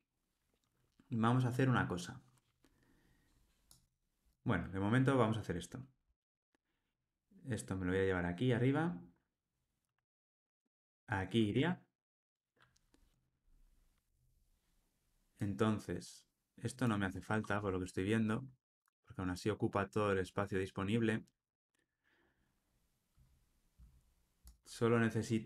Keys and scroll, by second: 10.0 super+x, 11.4 super+v.